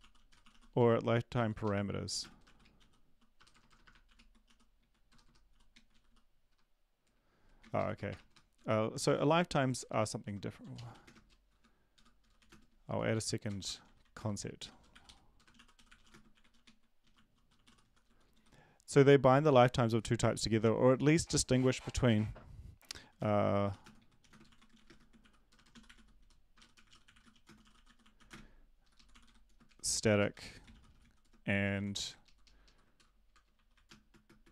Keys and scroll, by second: 0.0-1.0 typing, 1.3 Down, 1.6 Up, 2.1 Left, 2.2-6.6 typing, 7.8 Right, 7.8 ctrl+shift+Left, 8.1-9.1 typing, 8.5 Down, 9.0 Up, 9.8 Return, 10.6-12.7 typing, 11.5 Insert, 11.9 Home, 13.1 End, 13.5 Return, 13.6 Return, 13.8-18.4 typing, 23.0-32.9 typing, 28.8 Left, 33.3 Return, 34.1-34.5 typing.